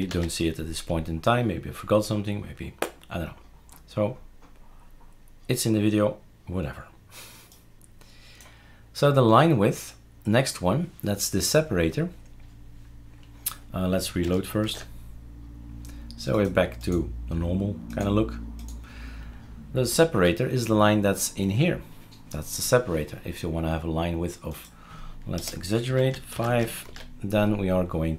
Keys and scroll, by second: 0.1 ctrl+s, 14.7 shift+super+r, 25.4 BackSpace, 25.8 5, 26.3 ctrl+s, 26.8 shift+super+r.